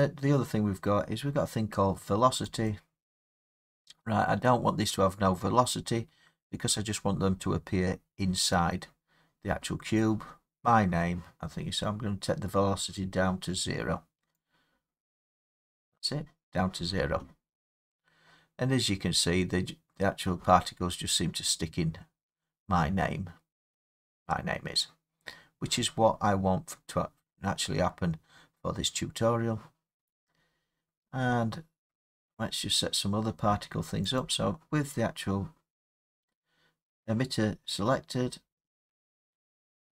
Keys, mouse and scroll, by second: 2.6 click, 15.6 click, 19.0 middle click, 19.2 middle click, 22.4 middle click, 23.9 middle click, 27.0 middle click, 30.3 middle click, 30.4 middle click, 32.4 middle click, 32.4 middle click, 32.6 middle click, 34.2 click, 35.4 scroll, 38.3 scroll.